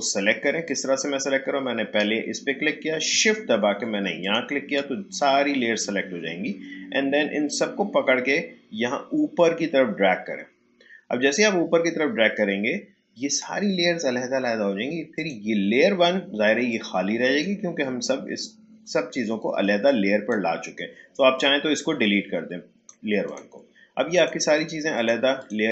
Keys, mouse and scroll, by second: 4.2 shift+click, 7.4-13.8 drag, 15.1-19.8 drag, 19.8-23.2 drag.